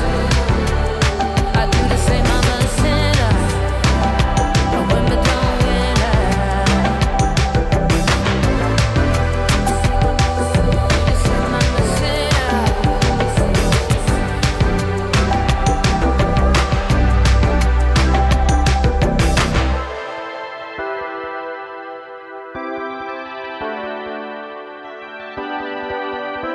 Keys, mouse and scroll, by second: 0.7-2.3 typing, 2.5 Return, 4.8 click, 5.3 typing, 17.5 click, 21.2-22.4 scroll down 1, 22.5 click.